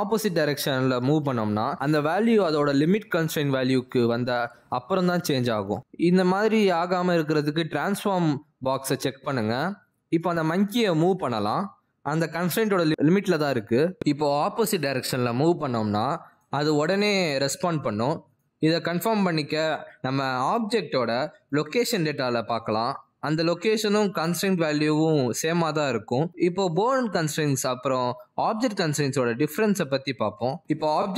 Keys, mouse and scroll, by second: 9.8 click, 12.1 click, 13.9 click, 17.1 click, 23.5 g.